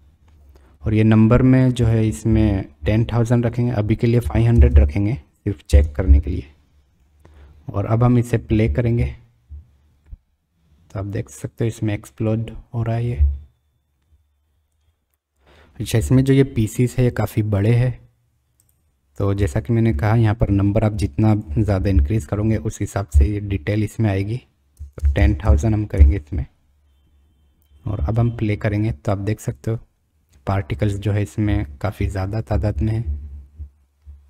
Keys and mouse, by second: 1.9-6.4 drag, 4.7 KP_0, 7.0-7.4 middle drag, 8.1 click, 8.6 space, 16.2 space, 21.3-26.5 drag, 25.0 KP_0, 25.4 KP_0, 27.9 space, 31.0 middle click, 32.0-34.1 middle drag.